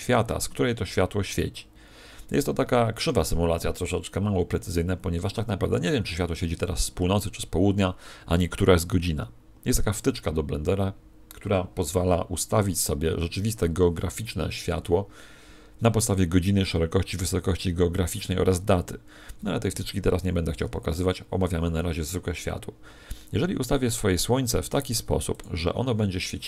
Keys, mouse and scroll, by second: 4.8 Escape, 25.3 click, 26.1 middle click.